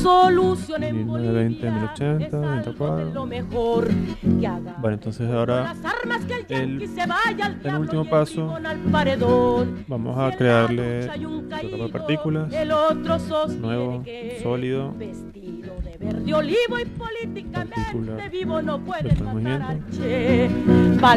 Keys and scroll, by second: 15.5-19.5 typing.